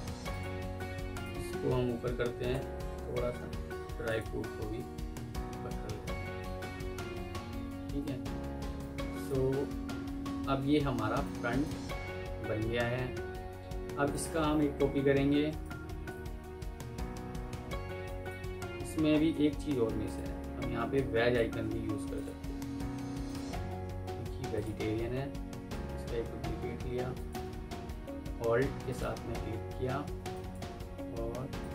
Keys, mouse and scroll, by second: 0.2 alt+click, 1.0 alt+click, 2.4 ctrl+Up, 3.3 Escape, 4.0 alt+click, 6.3 ctrl+Up, 7.3 Escape, 7.7 F2, 9.8 F4, 10.8 F2, 14.7 Delete, 15.5 alt+click, 17.6 F2, 18.2 Escape, 18.6-19.0 alt+scroll down 1, 19.0-19.3 alt+scroll up 1, 20.8 ctrl+click, 27.0 shift+right click, 28.8 alt+click, 29.9 F2, 30.5 Escape.